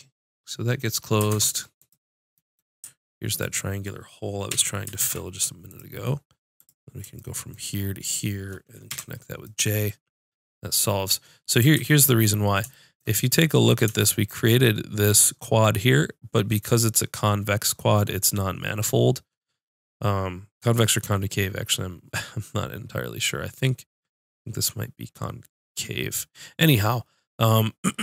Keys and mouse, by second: 1.3 ctrl+Tab, 3.5-4.5 drag, 4.5 f, 5.0 ctrl+Tab, 8.9 j, 11.8 ctrl+z.